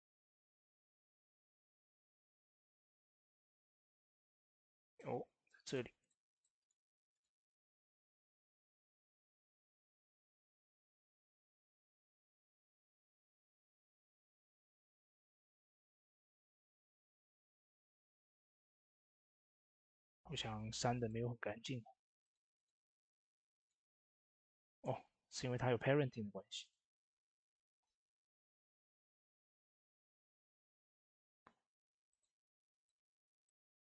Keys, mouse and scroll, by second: 0.9 shift+space, 1.5 click, 2.2 scroll up 1, 2.4 shift+middle click, 2.7 shift+scroll up 2, 3.5 shift+middle click, 3.8 scroll up 1, 4.4-7.7 drag, 4.8 typing, 7.7 Tab, 9.9-12.5 drag, 12.5 Tab, 13.2 click, 16.7 Tab, 17.1 click, 21.4 Tab, 22.1 click, 24.5 right click, 26.4 click, 30.7-31.2 scroll up 1, 31.9-33.3 drag, 33.3-33.8 middle drag.